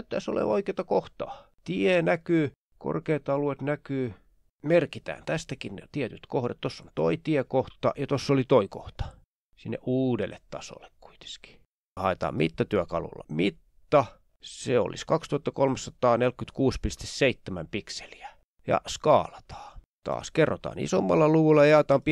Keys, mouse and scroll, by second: 2.3-2.9 shift+scroll up 1, 2.9-3.9 shift+scroll down 2, 3.9 shift+scroll down 1, 5.0 click, 5.3 click, 5.7 click, 6.0 click, 6.5 click, 7.3 ctrl+scroll up 2, 7.7 ctrl+click, 8.0-9.0 ctrl+scroll down 3, 9.0-9.6 ctrl+scroll up 2, 10.4 click, 10.7-11.3 ctrl+scroll down 5, 11.9 click, 12.8-13.2 ctrl+scroll up 2, 13.6 click, 15.7-17.1 drag, 18.6 click, 19.4 click, 20.0 click, 20.7 click, 21.8-22.1 typing.